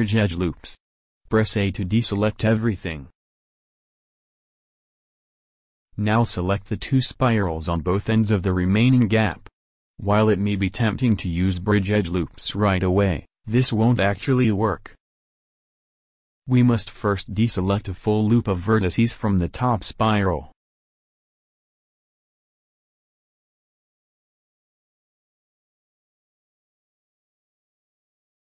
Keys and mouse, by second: 0.2 w, 1.5 a, 5.8 middle click, 22.0 middle drag, 28.3-28.5 middle drag.